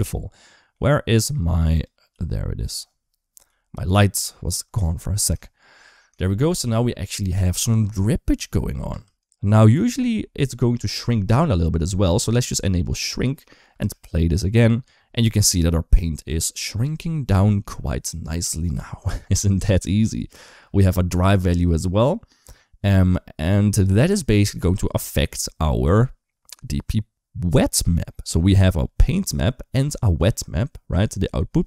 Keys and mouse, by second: 1.9 g, 3.2 KP_3, 3.6 KP_1, 5.2 shift+middle click, 6.0 shift+middle click, 6.6 space, 8.1 click, 8.7 space, 13.6 space, 20.2 space, 21.1 click, 28.2 middle click.